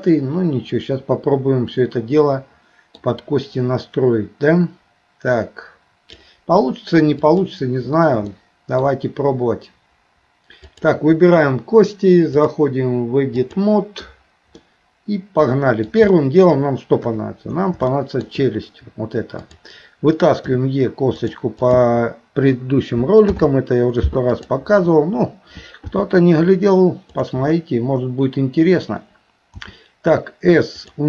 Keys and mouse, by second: 6.0 click, 7.3 click, 8.3 shift+middle click, 12.4-13.7 drag, 14.6-15.9 middle drag, 16.1 shift+middle click, 17.1 KP_3, 17.9 shift+middle click, 19.4 click, 20.5 e, 21.6 click, 23.2 alt+p, 25.8 g, 29.6 s.